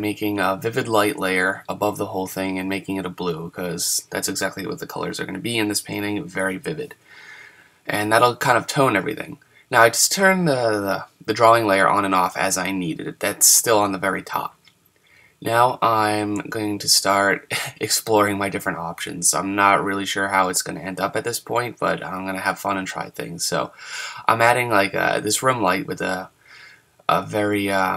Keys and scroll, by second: 1.3 super+z, 12.8 super+z, 19.3 super+z.